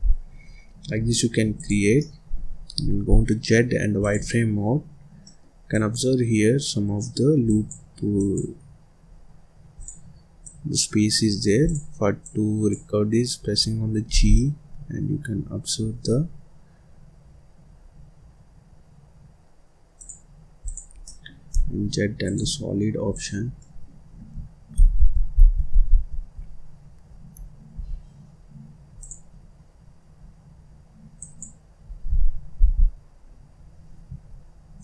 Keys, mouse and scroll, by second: 0.3 `, 0.7 Escape, 1.0-1.5 scroll down 4, 1.5 click, 1.9 middle click, 2.5-3.0 scroll up 2, 3.0 z, 4.7-5.0 scroll up 1, 5.0 scroll down 1, 5.2 middle click, 5.7 click, 6.6 scroll up 2, 6.8 scroll down 1, 7.0 middle click, 7.4 click, 8.1 click, 9.0-9.7 scroll up 2, 9.7 click, 10.4 click, 11.6 click, 12.2 click, 13.3 scroll down 1, 13.6-14.0 scroll up 1, 14.0 g, 20.2-20.6 scroll down 1, 20.6 click, 21.0 middle click, 21.2 scroll down 1, 21.4 z, 23.0 click, 23.6 middle click, 24.0-24.3 scroll up 1, 24.7 ctrl+z, 25.3 ctrl+z, 26.6-27.3 scroll up 2, 27.3-27.7 scroll down 1, 27.7 z, 29.6-30.1 scroll up 2, 30.1-30.6 scroll down 2, 30.6-31.1 scroll up 2, 31.1 click, 31.8-32.5 scroll down 2, 32.5 g, 34.7 click.